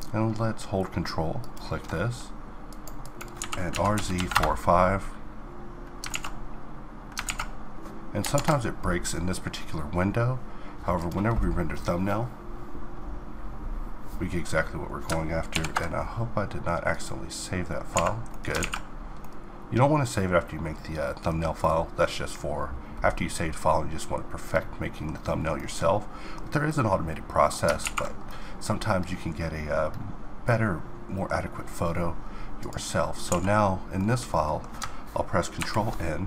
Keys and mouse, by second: 32.2 click, 32.9 a, 33.9-35.1 drag, 35.1 ctrl+n.